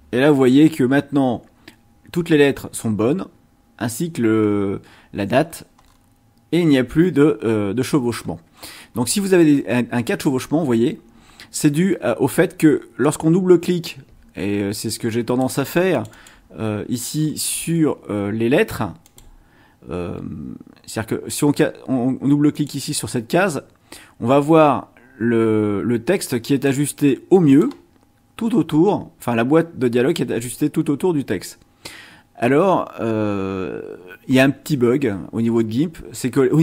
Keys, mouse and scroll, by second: 5.5-6.1 scroll down 4, 6.6-8.1 scroll down 2, 8.2-9.6 scroll up 8, 13.0-15.6 drag, 15.9 click, 17.1-17.9 scroll up 2, 19.0 click, 22.5 click, 26.6-27.8 drag.